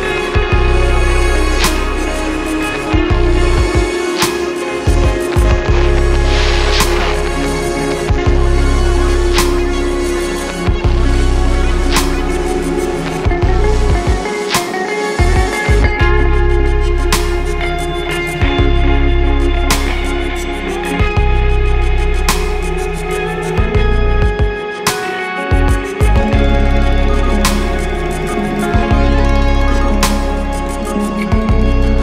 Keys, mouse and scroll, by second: 2.9 space, 3.1 click, 3.6 space, 3.9 click, 7.6 space, 7.7 click, 8.2 space, 8.4 click, 11.9 click, 19.3 space, 19.5 click, 19.9 space, 20.2 click, 22.1 space, 22.2 click, 22.7 space, 22.9 click, 23.9 space, 24.0 click, 24.5 space, 24.9 click, 26.5 alt+scroll down 1, 27.8 click, 28.8 ctrl+alt+shift+e, 30.1 ctrl+shift+a.